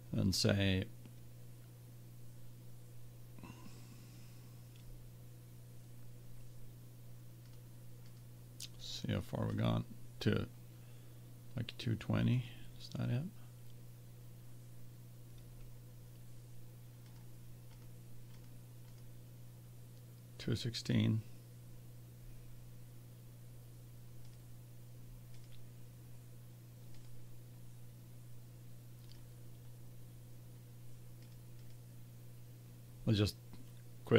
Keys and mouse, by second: 7.5 click, 12.6-14.2 drag, 17.0-20.4 drag, 24.2-27.2 drag, 28.5-33.5 drag.